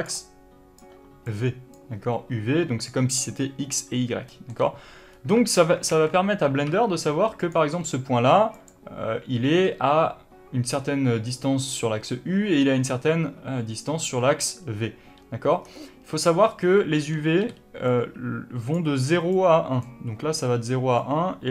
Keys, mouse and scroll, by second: 0.0 d, 0.7 d, 1.6 d, 4.2-7.3 middle drag, 4.4 d, 5.0-5.7 scroll up 2, 5.7 scroll up 1, 5.8 alt+a, 6.6 1, 7.3 click, 7.7 g, 8.6 click, 15.6 scroll down 1, 17.4 d, 17.8-21.5 drag, 18.6 d, 19.7 d.